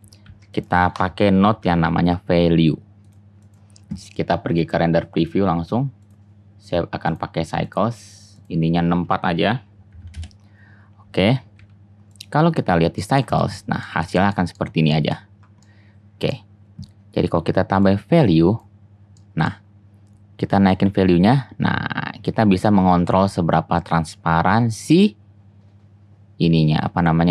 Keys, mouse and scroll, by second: 0.3 shift+a, 11.6 z, 12.6 click, 17.4-20.9 drag, 21.3-27.3 drag.